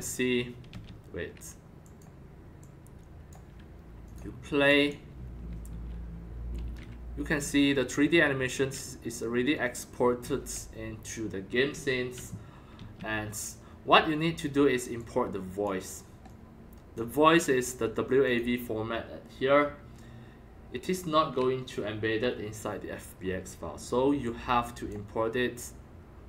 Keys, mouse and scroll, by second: 0.0-0.8 typing, 1.8 click, 2.6 click, 4.0 click, 4.6 click, 4.8-7.4 typing, 5.2 click, 6.2 right click, 8.6-10.2 typing, 11.7 s, 12.7 Escape, 14.9 click, 16.3-17.6 drag, 18.2 click, 19.3-23.4 drag, 24.2 click, 25.1-26.2 drag.